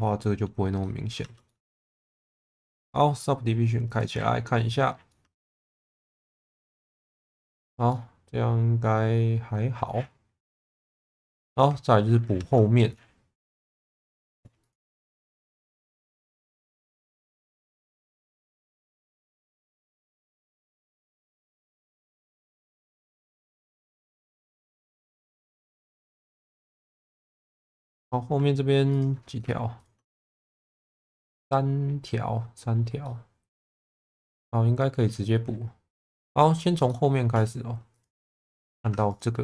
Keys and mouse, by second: 0.8 middle click, 1.2 Tab, 1.4 middle click, 3.9 click, 5.1 middle click, 6.0 middle click, 7.5 shift+middle click, 7.8-9.8 middle drag, 10.8 click, 11.4 alt+middle click, 12.3 Tab, 13.6 click, 14.0 shift+middle click, 14.5 click, 14.8 Tab, 15.2 shift+middle click, 16.2 shift+middle click, 17.5 shift+middle click, 19.3 click, 20.7 click, 21.7 click, 22.1 click, 24.2 click, 25.2 click, 25.7 click, 26.9 shift+middle click, 27.5 2, 33.0 middle click, 34.0 middle click, 36.0 middle click, 36.8 shift+middle click, 38.4 shift+middle click, 38.8 1.